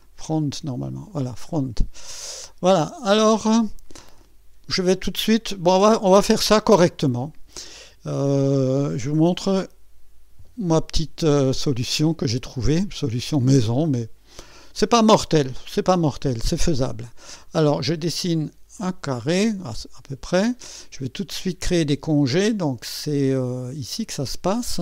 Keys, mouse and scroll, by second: 0.0 click, 1.5-1.8 scroll up 1, 2.1-2.7 right drag, 3.0-5.6 scroll up 2, 5.6 scroll up 1, 6.4-8.2 right drag, 14.4 click, 17.5 click, 18.8 click, 19.6 right click.